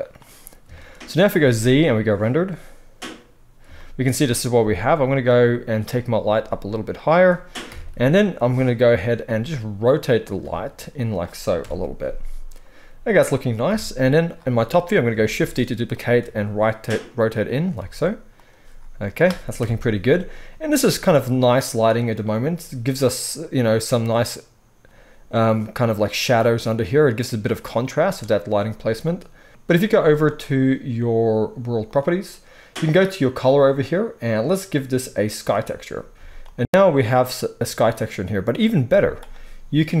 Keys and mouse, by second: 1.3 z, 4.6 g, 6.4 g, 7.0 middle click, 7.7 KP_1, 8.0-9.1 middle drag, 9.2-14.0 middle drag, 9.2 g, 10.4 r, 11.6 KP_0, 13.6 KP_7, 15.2 shift+d, 16.2 r, 17.7 g, 18.2-24.4 middle drag, 19.5 KP_0, 24.9-30.3 middle drag, 29.8 z, 30.3 click, 30.4-31.8 middle drag, 31.8 click, 31.9-33.4 middle drag, 33.4 click, 33.5 middle click, 34.2-40.0 drag, 36.1 z, 38.8 z.